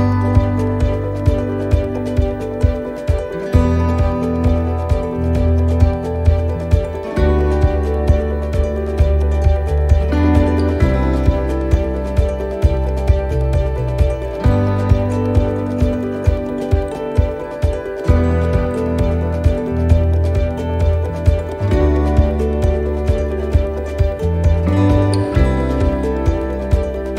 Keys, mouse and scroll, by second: 2.5 middle click, 8.2 scroll up 1, 9.3 alt+shift+right click, 11.1 alt+shift+right click, 11.5 ctrl+z, 11.9 middle click, 13.5 alt+shift+right click, 14.4 middle click, 16.4 alt+shift+right click, 20.2 alt+shift+right click, 20.2 shift+middle click, 20.9 middle click, 22.4 shift+middle click, 23.2 alt+shift+right click, 24.7 alt+shift+right click, 24.9 middle click.